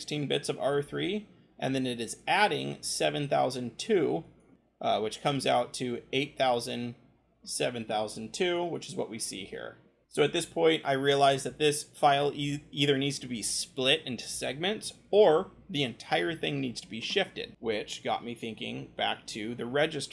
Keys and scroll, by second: 17.6-20.0 typing.